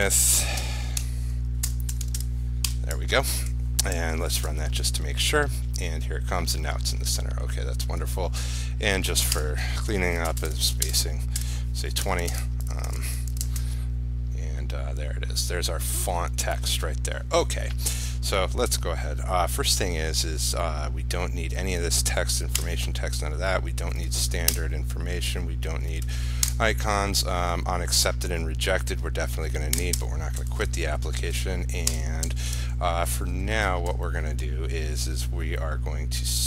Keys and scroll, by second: 3.6 ctrl+s, 4.6 ctrl+r, 12.9 ctrl+s, 13.5 ctrl+r.